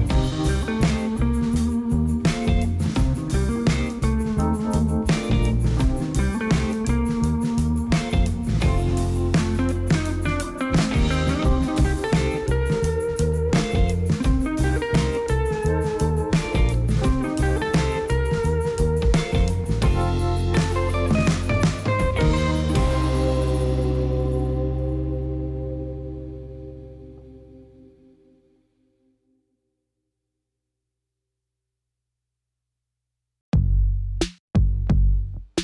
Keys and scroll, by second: 0.9 ., 1.1 9, 1.4 Return, 2.8 Tab, 5.2 2, 8.9 g, 9.1 z, 11.2 ctrl+b, 13.9 Tab.